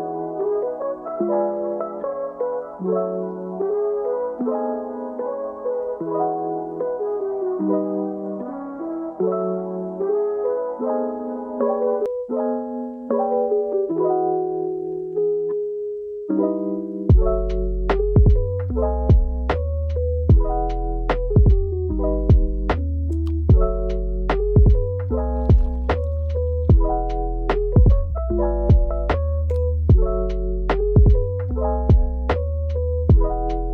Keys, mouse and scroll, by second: 0.0 right click, 0.3 click, 0.6 scroll down 12, 1.0 scroll up 4, 1.1 click, 1.4 click, 1.5 shift+middle click, 1.6 g, 1.7 KP_1, 1.9 s, 2.0 middle click, 2.0 scroll up 2, 2.2 scroll down 3, 2.5 click, 2.7 click, 2.9 g, 3.2 Tab, 3.7 click, 3.7 middle click, 3.8 scroll down 5, 3.9 middle click, 4.3 click, 4.4 scroll up 3, 4.5 scroll down 1, 5.8 click, 5.9 g, 6.7 click, 6.9 Tab, 7.0 middle click, 7.0-7.5 scroll up 3, 7.2-8.6 typing, 8.1 click, 8.2-8.6 scroll up 2, 9.0 click, 9.1 Tab, 9.1 alt+s, 9.2 alt+s, 9.6 alt+s, 9.9-13.5 typing, 10.0 click, 10.5 click, 10.7 alt+s, 10.7 click, 10.9 scroll up 4, 11.1 click, 11.3 middle click, 11.8 middle click, 12.2 Tab, 12.6 middle click, 13.0 middle click, 13.5 scroll up 2, 13.6 click, 13.7 scroll down 3, 14.0 scroll up 2, 14.2 scroll down 4, 14.5 click, 14.6 Tab, 14.7 click, 14.8 shift+middle click, 14.9 shift+click, 15.0 ctrl+z, 15.1 middle click, 15.2 ctrl+z, 15.6 click, 15.7 middle click, 15.9 ctrl+KP_Subtract, 16.2 Tab, 16.3 Tab, 16.4 click, 16.7 click, 17.0-31.9 typing, 17.1 click, 17.2 scroll down 4, 17.3 scroll up 3, 17.6 scroll down 1, 17.7 middle click, 17.9 shift+middle click, 18.0 click, 18.0 middle click, 18.3 scroll down 2, 18.3 shift+middle click, 18.9 scroll up 3, 18.9 scroll down 2, 19.6 middle click, 19.8 middle click, 20.1 middle click, 20.2 shift+middle click, 20.4 scroll down 8, 20.7-21.3 scroll up 2, 20.9 middle click, 21.4 middle click, 21.8 click, 22.2 middle click, 22.6 scroll up 3, 22.8 scroll down 2, 23.0 click, 23.8 middle click, 24.6 Tab, 24.8 shift+click, 24.9 ctrl+p, 24.9 click, 25.1 scroll up 3, 25.2 alt+click, 26.1-26.4 scroll up 1, 27.8 ctrl+z, 28.5 alt+click, 28.8 alt+Left, 29.3 alt+Left, 29.6 alt+Left, 30.1 Left, 30.2 middle click, 30.5 ctrl+z, 30.6 ctrl+z, 30.8 alt+Left, 30.9 scroll up 2, 31.1 scroll down 2, 31.3 scroll up 1, 31.4 middle click, 31.5 scroll down 1, 31.6 middle click, 31.7 scroll up 1, 32.0 Tab, 32.2 middle drag, 32.4 Tab, 32.7 middle click, 32.8 click, 32.9 middle click, 33.1 ctrl+r, 33.2 Tab, 33.4 ctrl+r, 33.5 middle click.